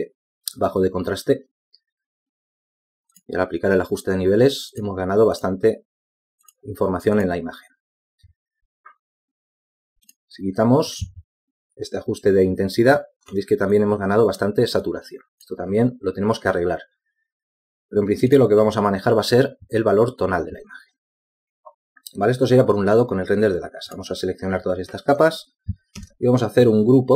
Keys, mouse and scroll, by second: 15.6 z, 26.2 shift+click.